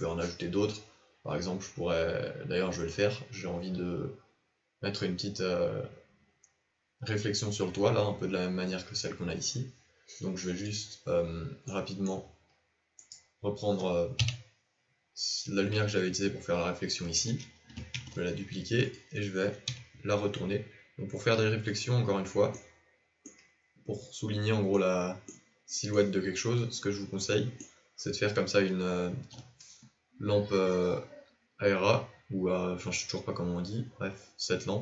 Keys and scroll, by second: 14.1 KP_7, 17.9 shift+d, 19.7 r.